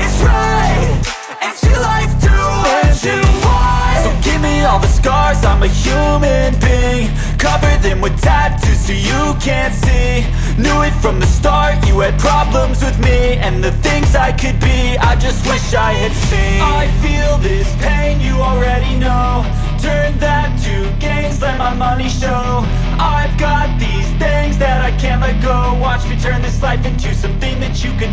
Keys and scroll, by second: 8.0 BackSpace, 8.3 shift+u, 8.7 p, 9.0 ctrl+s, 16.0 BackSpace, 16.3 ctrl+s.